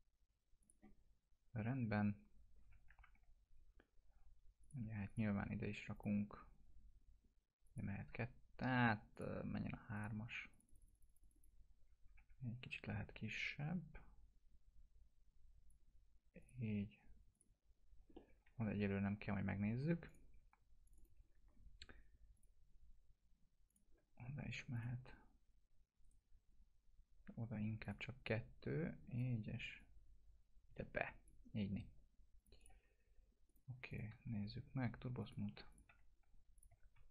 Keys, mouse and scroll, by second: 1.1-1.4 scroll up 1, 3.0 F3, 4.6 click, 5.1 shift+click, 5.9 click, 12.2 F4, 13.6-15.8 drag, 18.2-18.7 middle click, 18.8 F3, 20.1 click, 26.0 right click, 27.8-29.2 drag, 29.8-31.3 drag, 32.4 click, 34.1 t, 35.2 click, 35.9 F3, 36.5 click, 36.8 alt+q.